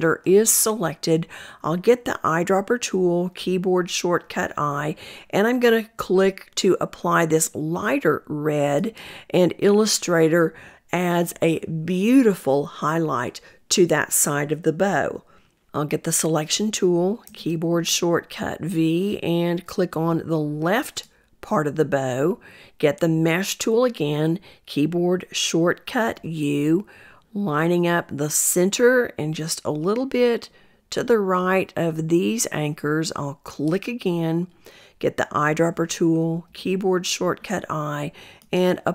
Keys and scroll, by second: 15.5 v, 22.8 u, 34.5 i.